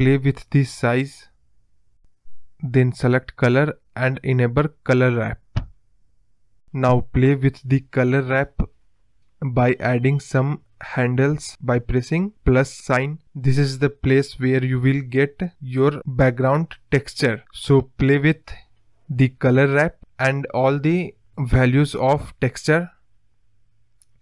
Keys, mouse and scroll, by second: 0.4-2.0 scroll down 1, 2.0-3.5 drag, 3.6-4.8 drag, 4.8-5.9 scroll down 5, 5.9 click, 6.1-7.7 scroll down 5, 8.7 click, 9.3 drag, 9.5-10.1 scroll down 3, 10.1-11.1 scroll down 2, 11.9-14.2 drag, 15.6-18.0 drag, 20.3 click, 22.8 click.